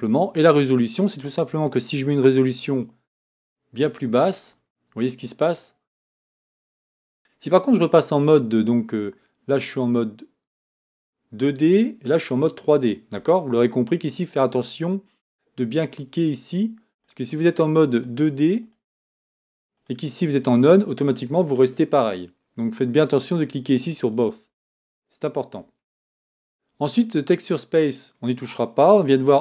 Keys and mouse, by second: 7.2 Tab.